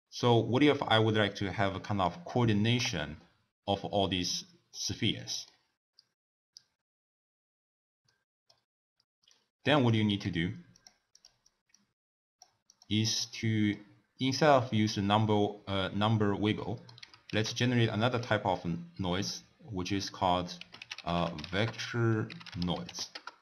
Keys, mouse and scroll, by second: 1.6 d, 2.1 right click, 2.8 d, 4.8-7.8 middle drag, 8.1-9.4 middle drag, 9.4 click, 10.1 g, 11.2 click, 11.8 click, 12.8 click, 13.4-16.4 middle drag, 16.6 middle click, 17.3 ctrl+a.